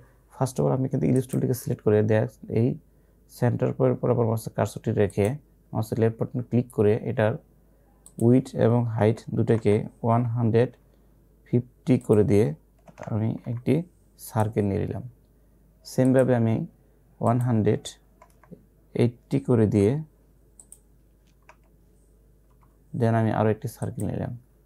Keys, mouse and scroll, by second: 3.4 click, 5.2 click, 8.0 click, 9.2 BackSpace, 12.0 click, 12.9 BackSpace, 14.4 click, 18.4 BackSpace, 20.7 click, 21.6 BackSpace, 24.0 click.